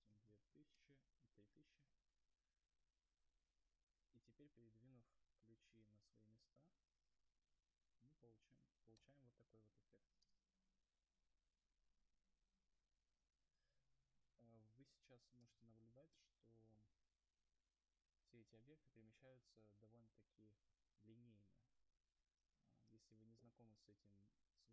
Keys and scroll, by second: 4.0 Return, 12.1 Return, 13.1 space, 13.6 0.